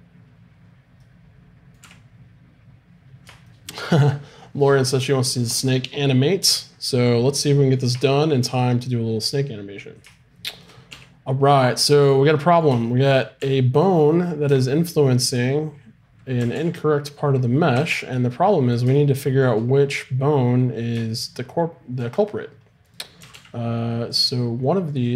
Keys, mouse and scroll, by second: 1.8 z, 8.2-10.2 middle drag, 10.9 z, 13.4 z, 14.5 Tab, 16.4 r, 22.9-25.1 right drag, 23.2 r.